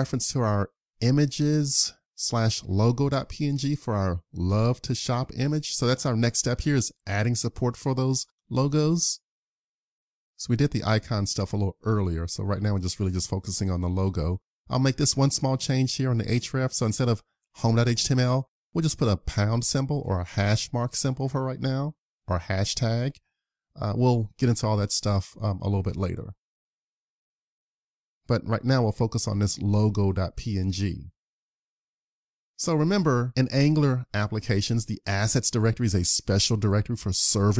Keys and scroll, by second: 22.9 super+s, 31.5 super+s.